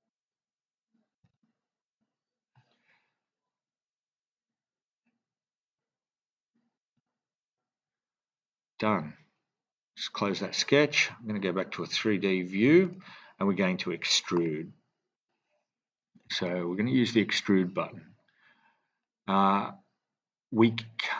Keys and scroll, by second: 1.2 typing, 1.8 Return, 7.4 Return.